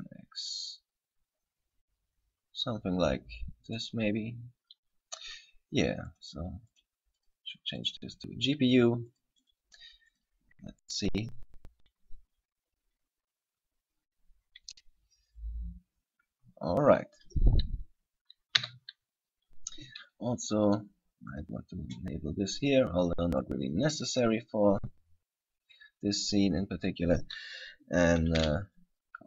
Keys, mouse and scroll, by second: 4.0 click, 4.9-5.2 scroll up 1, 5.2 scroll down 1, 5.3 scroll down 2, 6.3 click, 6.9 click, 9.2 click, 10.6 click, 19.0 z, 20.8 click, 21.5 click, 23.8 click, 25.4 scroll up 1, 28.6 KP_7.